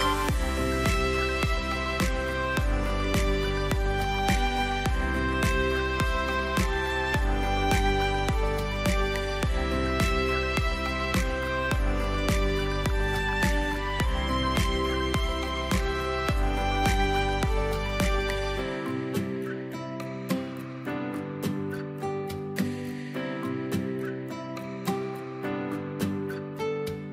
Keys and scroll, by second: 4.4 v, 5.4 space, 9.5 v, 18.7 space, 20.9 a.